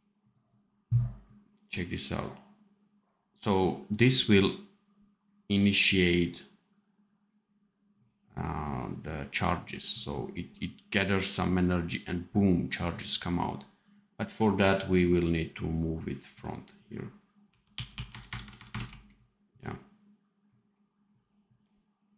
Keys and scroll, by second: 17.3 r, 17.9 r, 18.0 KP_Add, 18.5 KP_Add.